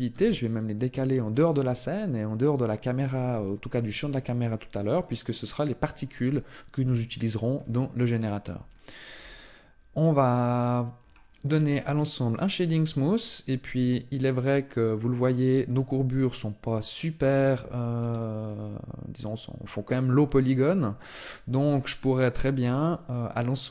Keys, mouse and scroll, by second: 2.3 click, 6.7 shift+middle click, 7.7 scroll up 1, 8.5 shift+middle click, 8.5 scroll up 3, 10.7-12.1 scroll up 1, 12.1 click, 12.1-12.4 scroll up 3, 12.9 middle click, 15.8 middle click, 17.0 shift+middle click, 17.7-18.6 scroll up 2, 18.2 middle click, 20.9 middle click.